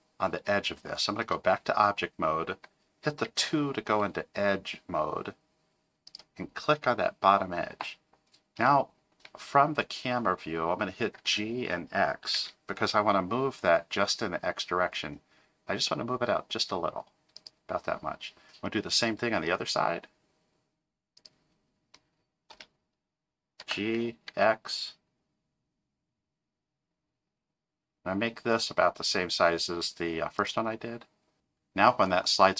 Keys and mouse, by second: 1.2 Tab, 3.3 2, 9.1 KP_0, 11.2 g, 18.6 middle click, 22.5 KP_0, 23.6 g.